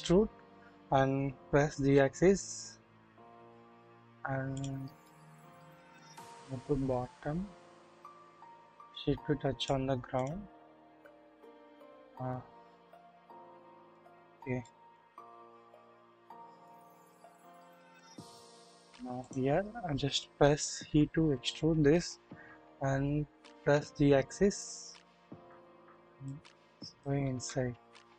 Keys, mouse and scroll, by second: 1.8 typing, 5.0 shift+click, 6.1-9.7 drag, 11.4-13.6 drag, 13.6 shift+middle click, 14.6 shift+middle click, 15.1 shift+scroll up 1, 16.7 middle click, 17.2 shift+scroll up 1, 17.4 shift+middle click, 20.9 typing, 23.9 typing, 26.2 click, 27.3 alt+z.